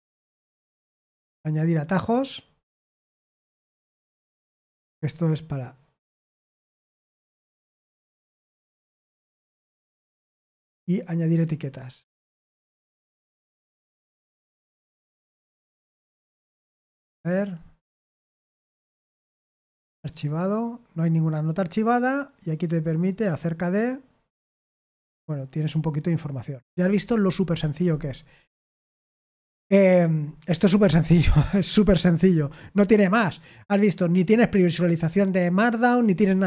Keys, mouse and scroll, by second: 1.3-4.2 scroll down 1, 4.2-9.8 scroll down 1, 9.8-12.0 scroll down 1, 12.0-15.1 scroll down 1, 15.1-15.7 scroll down 1, 15.7-17.2 scroll down 1, 17.2-20.0 scroll down 1, 20.0-21.5 scroll down 1, 21.5-24.1 scroll down 1, 24.1-25.5 scroll down 1, 25.5-27.4 scroll down 1, 27.4-33.5 scroll down 1, 33.5 scroll down 1.